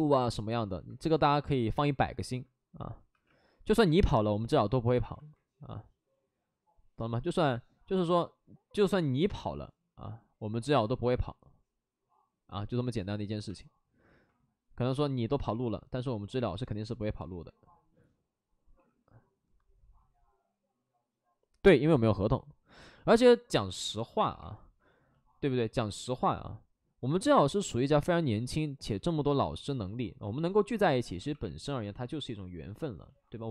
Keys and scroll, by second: 0.8 ctrl+shift+d, 1.7 ctrl+z, 3.1 2, 3.7 w, 6.6 ctrl+z, 14.1 ctrl+z, 18.7 2, 23.1 ctrl+d, 23.5 ctrl+d, 24.1 w, 27.8 ctrl+z, 31.1 x, 31.9 x.